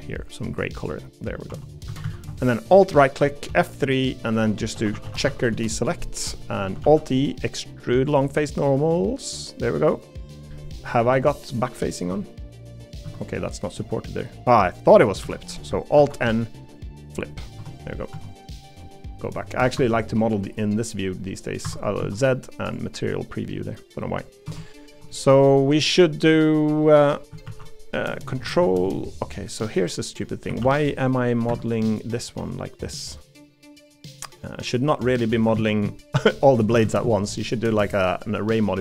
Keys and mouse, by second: 1.1 middle click, 1.5 3, 1.9 a, 2.0 a, 3.5 F3, 6.8 alt+e, 13.0 z, 14.0 middle click, 15.2 l, 16.0 alt+n, 17.6 Tab, 19.1 click, 19.8 Escape, 21.1 click, 22.0 Escape, 22.0 z, 23.1 middle click, 23.7 middle click, 24.0 middle click, 24.4 Tab, 24.9 3, 25.1 middle click, 25.8 middle click, 26.8 middle click, 27.4 ctrl+r, 29.4 middle click, 30.6 ctrl+r, 32.1 middle click, 33.3 middle click, 34.2 middle click, 35.5 alt+z, 36.8 ctrl+z.